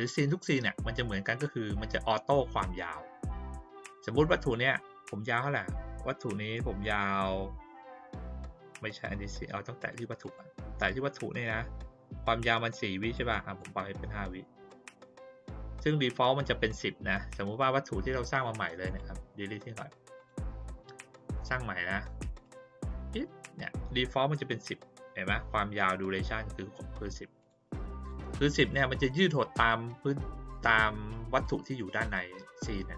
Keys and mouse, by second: 1.4 click, 4.3 click, 9.8 click, 10.2 click, 13.1 click, 18.8 right click, 20.1 click, 21.3 click, 22.4 click, 22.9 click, 27.4 click, 27.9 click.